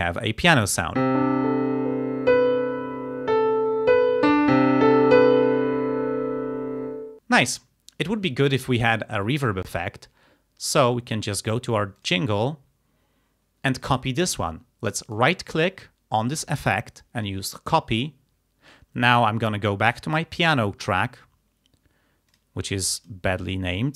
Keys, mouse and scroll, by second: 12.0 click, 15.1 right click, 18.0 click, 20.0 click, 22.3 click, 22.8 click, 23.5 click.